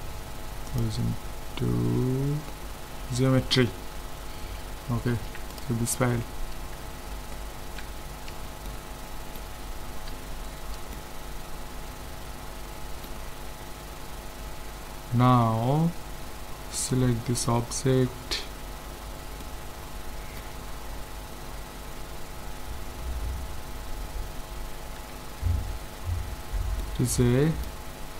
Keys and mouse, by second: 5.1 ctrl+s, 6.1-8.7 middle drag, 8.4 z, 11.6-16.8 middle drag, 16.8-18.5 right drag, 19.4-23.2 middle drag, 20.6 z, 25.0 Tab, 25.8 Tab, 26.4 Tab, 26.8 middle click.